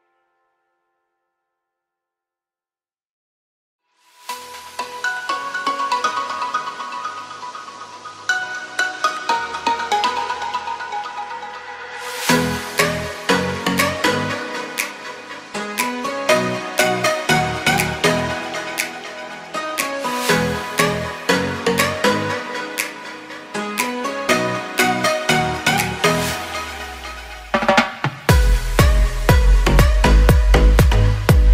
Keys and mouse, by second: 0.5 z, 1.5 z, 2.3-2.9 drag, 3.0 shift+drag, 3.6 click, 4.2 KP_3, 4.9 z, 5.2 shift+drag, 5.6 ctrl+s, 6.0 shift+click, 8.4-8.7 shift+drag, 8.8 shift+click, 9.2 shift+click, 9.4 shift+middle click, 10.0 z, 11.4-12.5 shift+drag, 14.4 Tab, 15.0 shift+click, 17.3 shift+click, 18.6 z, 19.4 c, 23.2 z, 23.7 shift+click, 24.2 shift+d, 25.1 click, 25.5 shift+click, 26.3 click, 27.2 shift+click, 28.2 click, 29.4 shift+click, 30.4 shift+click, 31.2 p.